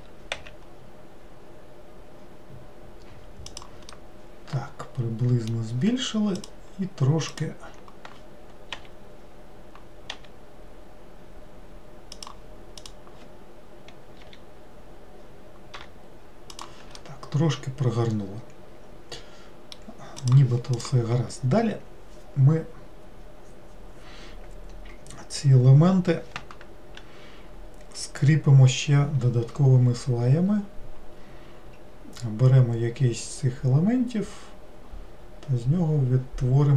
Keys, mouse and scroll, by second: 4.0-6.5 middle drag, 6.5 click, 7.4 click, 12.8 click, 14.3 ;, 15.8 r, 17.1-20.1 middle drag, 20.3 click, 36.0 scroll up 1.